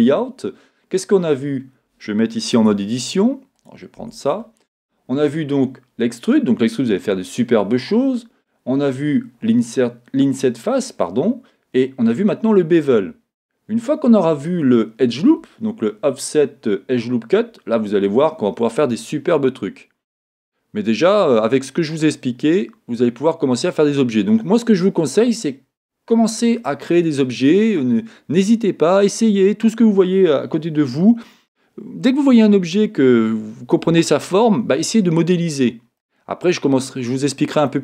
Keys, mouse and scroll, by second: 0.7-1.0 scroll down 2, 3.7 click, 4.0 Tab, 19.0-37.8 middle drag.